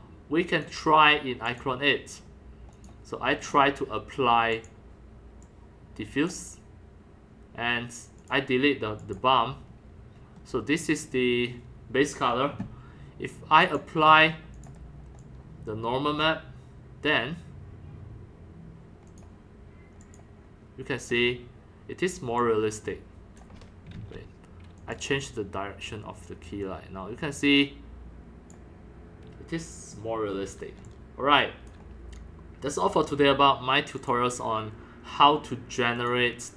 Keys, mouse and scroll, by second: 1.4 click, 1.9 middle click, 2.2 scroll down 1, 3.5-3.8 scroll down 6, 3.8 scroll, 4.5 click, 4.7-6.2 drag, 7.8 click, 9.0 click, 9.6 scroll up 3, 10.2 scroll, 10.3 scroll down 1, 11.1 scroll up 1, 11.1 scroll, 13.8-16.2 drag, 19.1 click, 20.0 click, 21.1 scroll up 1, 21.4-23.4 scroll down 2, 22.4 click, 22.8 middle click, 23.4 click, 24.0 ctrl+z, 24.8 click, 25.9-29.9 drag, 29.9 scroll down 1, 30.3 scroll up 1, 30.4 middle click, 30.8-31.7 c, 30.8 click, 34.0 click, 35.3-36.5 drag.